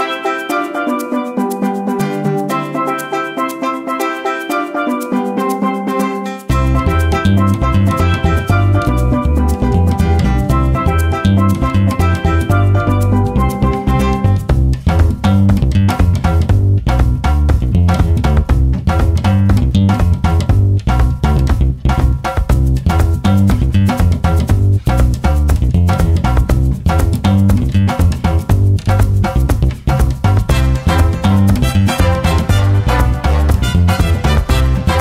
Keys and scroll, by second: 9.3 1, 9.8 ', 11.0 g, 13.8 ctrl+z, 18.6-19.3 typing, 26.0 ctrl+z, 26.4 `, 29.9-30.7 typing, 31.8 shift+., 32.9 F1.